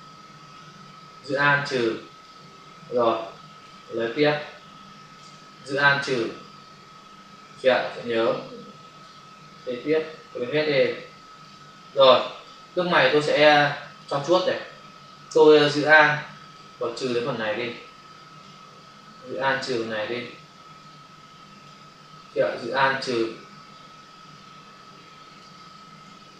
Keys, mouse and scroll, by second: 1.2 alt+click, 2.9 click, 4.1 space, 5.7 alt+click, 8.0 click, 9.4 click, 12.1 space, 12.3 click, 12.5 space, 16.6 alt+click, 19.4 alt+click, 22.5 alt+click, 26.0 space.